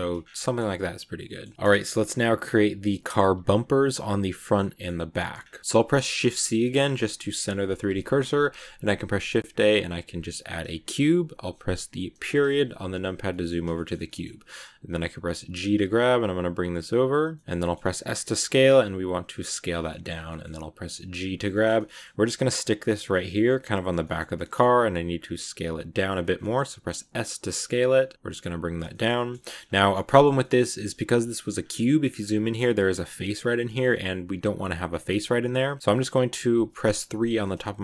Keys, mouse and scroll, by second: 0.1 scroll down 3, 0.1 Tab, 0.3-1.4 middle drag, 1.4 scroll up 2, 1.5-3.2 shift+middle drag, 3.2 a, 4.5 middle click, 5.3 scroll up 2, 5.6 KP_Decimal, 5.9 shift+c, 6.5-7.8 middle drag, 7.8 shift+a, 12.0 KP_Decimal, 12.9 scroll down 2, 13.2-15.3 middle drag, 15.3 g, 17.2 shift+middle click, 17.9 s, 19.5 scroll up 2, 19.8 middle click, 20.0 scroll down 1, 20.2 middle click, 20.9 g, 21.4 shift+middle click, 22.0 g, 23.1-24.7 middle drag, 24.7 s, 26.3 shift+middle click, 26.4 scroll up 1, 26.9 s, 28.1-29.5 middle drag, 29.5 scroll up 2, 29.7-31.5 shift+middle drag, 31.5 scroll up 1, 31.6 middle click, 32.0-33.7 scroll up 3, 33.7-35.4 scroll down 1, 35.4 scroll down 1, 35.5-37.1 middle drag, 37.1 3.